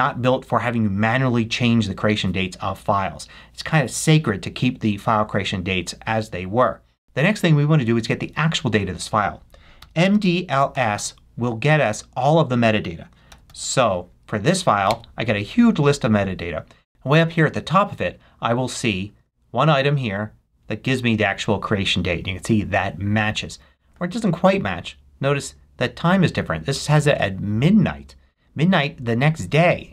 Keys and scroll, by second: 7.0 super+k, 9.8 m, 10.1 d, 11.0 space, 13.0-14.0 typing, 14.7 Tab, 15.9 Return.